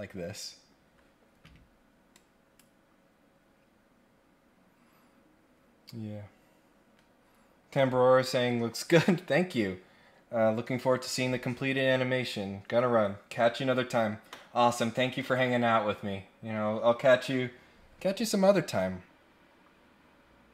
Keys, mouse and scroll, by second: 2.1 click.